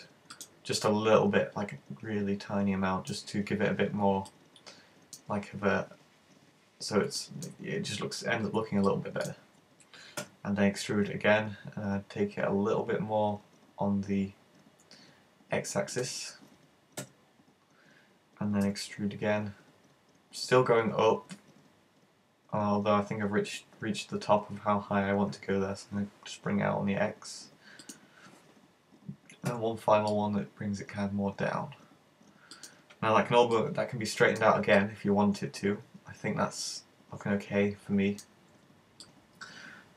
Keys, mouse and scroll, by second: 0.5 click, 0.9 middle click, 4.3 middle click, 7.3 middle click, 9.0 middle click, 10.3 e, 16.1 click, 17.1 KP_1, 18.7 e, 27.9 click, 29.5 e, 32.7 click, 33.5 middle click, 34.8 middle click, 38.6-39.2 scroll up 3, 39.1 middle click.